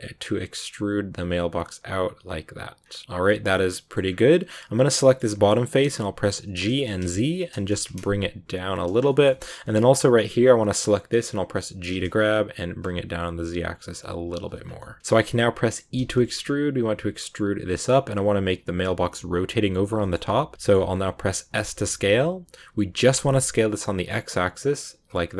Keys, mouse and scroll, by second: 2.7 scroll down 2, 3.0 middle click, 3.9 scroll up 2, 4.7 right click, 4.9 shift+middle click, 5.1-5.7 scroll up 3, 5.7 middle click, 5.9 g, 8.9 scroll down 2, 9.0-10.2 shift+middle drag, 10.2 right click, 11.8 g, 15.0-15.9 scroll up 1, 15.9 e, 19.9-21.5 shift+middle drag, 21.5 s.